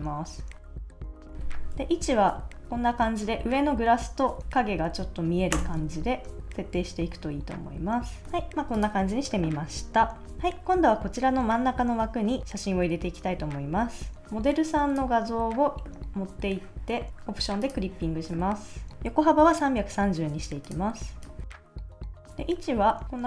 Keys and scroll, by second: 2.4 shift+Left, 2.8 shift+Up, 3.3 shift+Right, 3.6 shift+Down, 4.5 shift+Up, 5.5 Return, 6.3 Left, 7.2 shift+Up, 7.8 shift+Down, 8.2 super+s, 10.3 BackSpace.